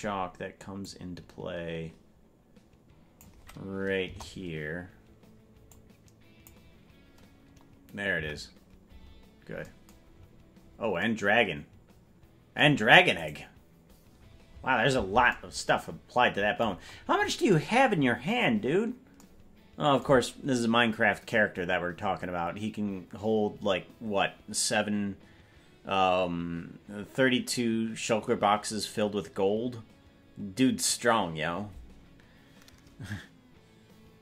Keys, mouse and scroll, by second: 0.8-3.3 drag, 4.0 KP_0, 5.7 click, 8.1 KP_Decimal, 8.9-9.6 scroll down 1, 9.6 scroll down 5, 10.0-10.9 scroll up 7, 13.2 right click, 14.1-14.8 scroll down 10, 16.8-17.2 scroll up 8, 17.2 scroll down 1.